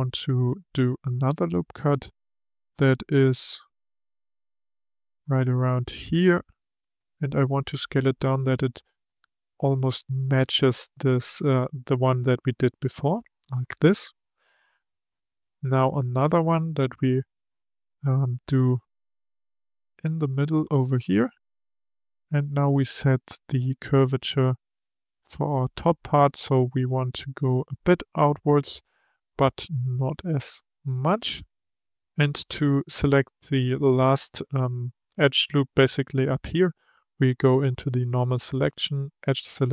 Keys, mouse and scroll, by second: 3.8-6.8 drag, 7.0 s, 19.4-21.6 drag, 21.6 s, 32.3-35.3 drag.